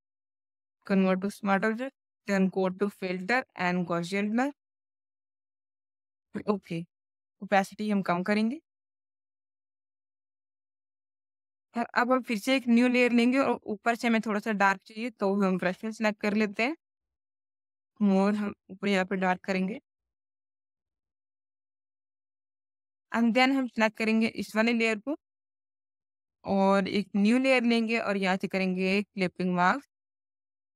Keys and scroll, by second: 1.1 space, 2.1 v, 22.0 space.